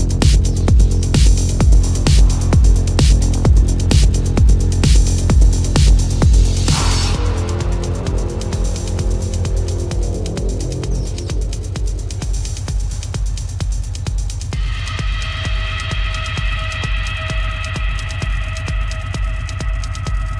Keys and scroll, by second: 7.2 space, 7.5 space, 8.4 ], 8.7 ], 9.0 ctrl+-, 9.6 ctrl+-, 9.9 ], 16.6 ctrl+alt+z.